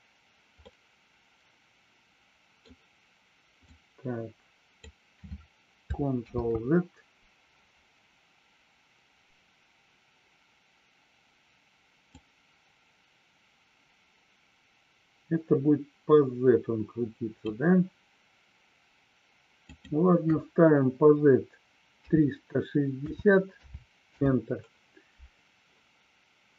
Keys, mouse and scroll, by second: 6.3 ctrl+z.